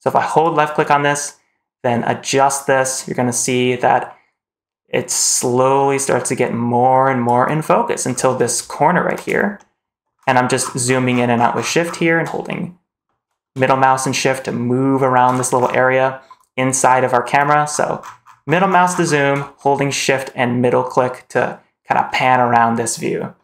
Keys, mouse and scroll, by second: 0.3-4.4 drag, 8.0-8.4 scroll up 3, 9.4-9.9 shift+middle drag, 10.0-10.7 shift+scroll down 5, 10.7 scroll up 2, 10.9 scroll down 2, 11.2 scroll up 2, 11.4 scroll down 2, 11.7-12.1 scroll up 2, 12.4-12.9 shift+middle drag, 13.6-15.0 shift+middle drag, 15.1-15.9 scroll down 4, 17.6 scroll up 3, 17.9 scroll down 2, 18.1 scroll up 2, 18.3 scroll down 2, 18.5 scroll up 2, 18.7 scroll down 1, 18.8 scroll down 1, 18.9-19.4 scroll up 2, 19.4-20.0 shift+middle drag, 20.2-22.4 shift+middle drag, 22.7 shift+middle click, 23.0 shift+middle drag.